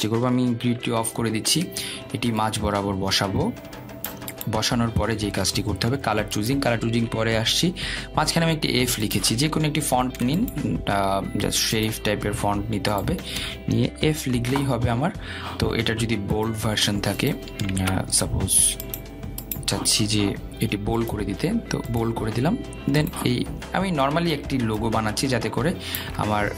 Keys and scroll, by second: 1.7 ctrl+', 18.7 ctrl+a.